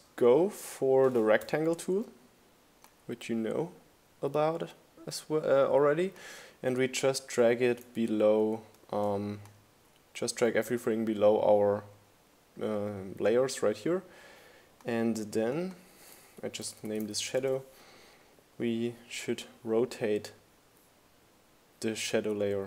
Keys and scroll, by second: 14.4-15.9 typing.